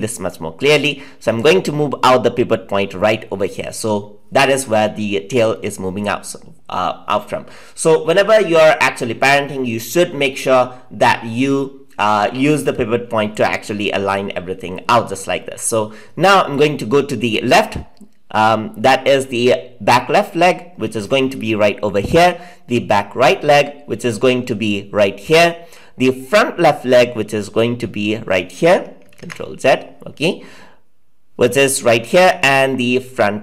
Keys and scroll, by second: 29.1 ctrl+z.